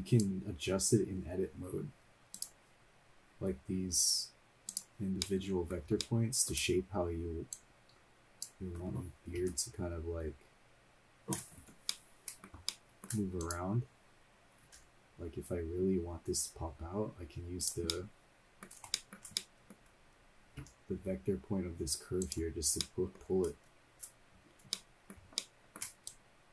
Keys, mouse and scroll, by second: 0.0 shift+middle click, 0.0 right click, 2.4 click, 2.9 scroll up 2, 3.5 scroll down 2, 4.7 click, 5.2 middle click, 6.0 shift+middle click, 6.7 scroll up 2, 7.5 click, 9.4 g, 11.8 middle click, 12.7 shift+middle click, 13.5 click, 15.5 g, 17.9 middle click, 18.9 shift+middle click, 19.3-20.6 middle drag, 20.6 g, 22.8 middle click, 23.5 scroll down 1, 24.0 scroll down 1, 25.6 shift+middle click, 26.1 click.